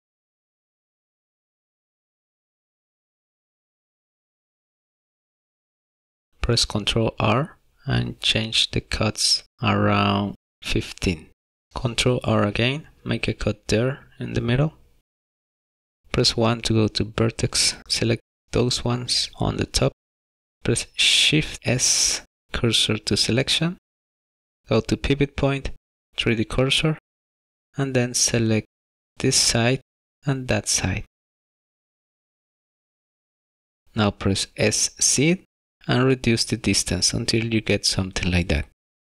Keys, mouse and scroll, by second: 2.1 ctrl+r, 12.2 ctrl+r, 16.3 1, 17.3 click, 21.5 shift+s, 25.3 click, 26.9 shift+middle click, 28.7 click, 31.5 shift+click, 38.0 s.